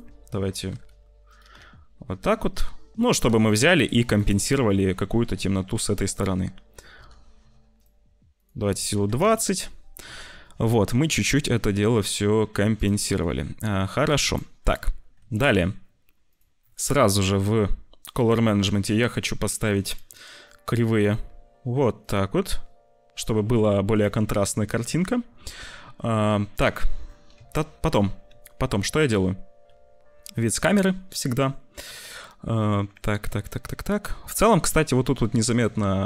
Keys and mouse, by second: 0.0 `, 0.6 g, 1.3 g, 4.1 g, 5.3 s, 6.7 g, 8.4 click, 10.0 ctrl+s, 12.7 click, 13.1 shift+middle click, 14.2 click, 15.2 ctrl+s, 18.1 c, 19.8 click, 20.1 click, 22.1 click, 23.8 click, 24.8 ctrl+s, 26.6 click, 27.3 `, 28.3 ctrl+s, 29.6 `, 34.7 shift+middle click, 35.7 shift+middle click.